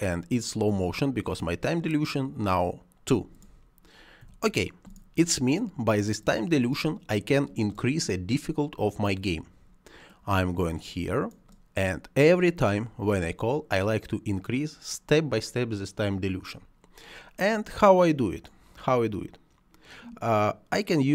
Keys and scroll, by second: 4.1 1.